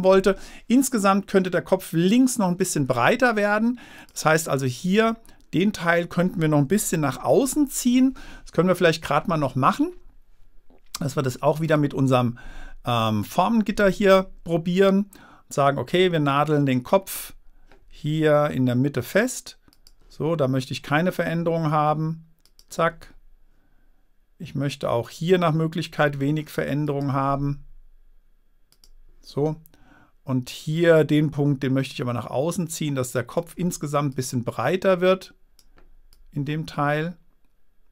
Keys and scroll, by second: 7.3 super+-.